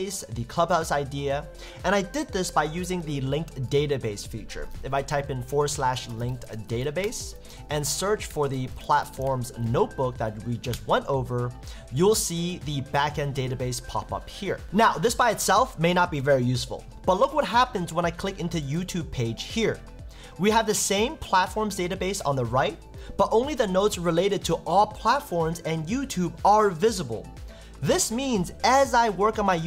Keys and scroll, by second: 7.0 Return, 10.7 Return.